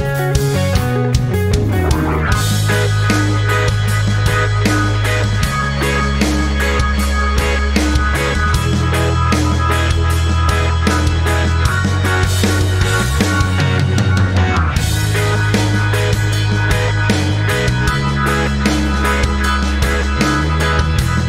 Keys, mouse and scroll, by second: 3.1-6.6 shift+drag, 6.6 ctrl+scroll down 1, 7.3 click, 7.7 ctrl+scroll up 1, 8.6 ctrl+scroll down 1, 9.3 click, 12.5 i, 13.7 click, 18.3 click.